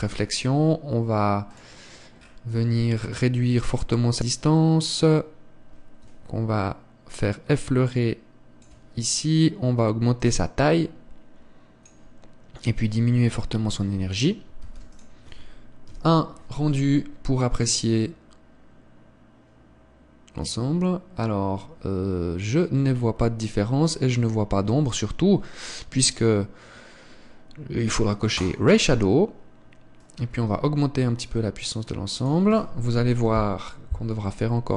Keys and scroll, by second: 15.6 ctrl+s, 25.9 Escape.